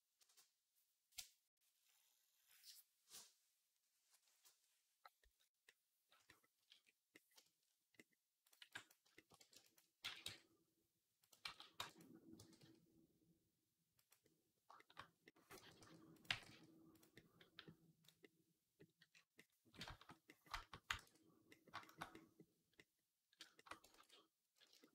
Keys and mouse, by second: 8.4 b, 9.2 b, 9.9 g, 11.3 ctrl+z, 11.6 b, 12.2 g, 14.1 middle click, 14.5-17.5 shift+drag, 15.4 g, 16.1 g, 17.5-22.6 right drag, 20.9 ctrl+s, 22.6-24.9 drag, 23.8 ctrl+s.